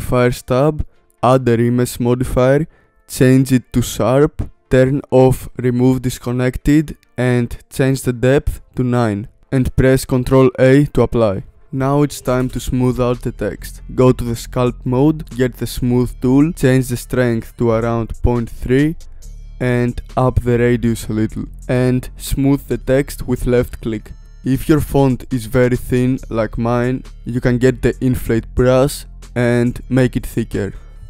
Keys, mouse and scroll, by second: 0.7 click, 1.3 click, 2.6-3.6 drag, 4.9 click, 5.8-10.2 drag, 10.2 ctrl+a, 13.3-21.7 drag, 23.9 scroll up 3, 24.7-31.0 drag.